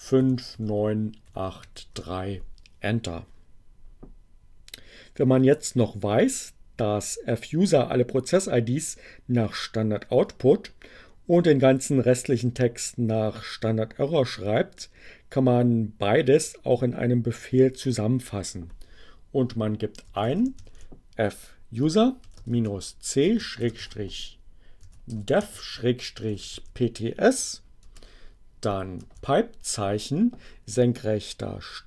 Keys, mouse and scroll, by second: 0.0-1.8 typing, 1.9 Return, 19.4-23.4 typing, 24.5-27.4 typing, 28.9 alt+<, 30.1 space.